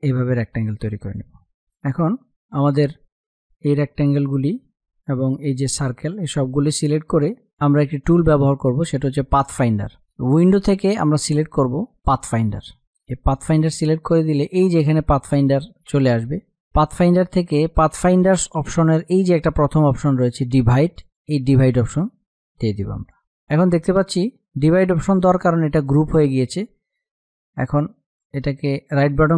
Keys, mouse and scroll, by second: 1.3 space, 1.8 click, 4.1 space, 4.3 click, 4.7 space, 5.6 shift+click, 6.1 space, 6.3 click, 6.6 space, 12.7 click, 20.9 click, 22.7 space, 23.1-24.7 drag, 24.7 ctrl+z, 25.1 click, 28.8 right click.